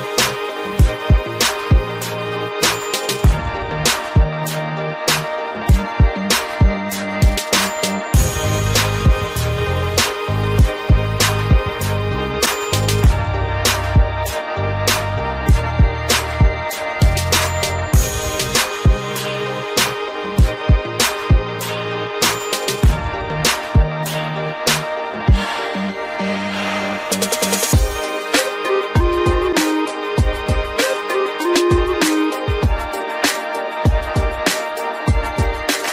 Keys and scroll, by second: 15.3 ctrl+0, 23.2 ctrl++.